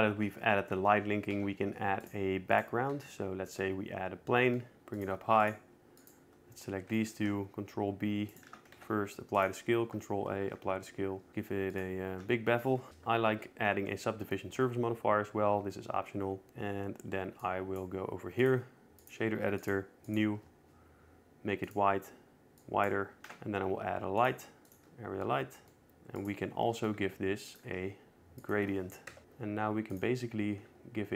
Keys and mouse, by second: 2.1 shift+a, 3.7 s, 4.8 ctrl+z, 4.8 e, 5.2 g, 5.3 z, 5.7 click, 6.0 2, 6.2 click, 6.8 shift+click, 7.9 ctrl+b, 9.1 right click, 9.3 Tab, 9.5 ctrl+a, 10.6 Tab, 11.2 ctrl+b, 12.9 Tab, 13.6 ctrl+2, 14.4 middle click, 18.2 click, 19.2 click, 20.4 click, 22.4 click, 24.0 shift+a, 26.5 g, 26.9 drag, 27.8 r, 28.4 g, 29.1 click, 29.2 KP_0.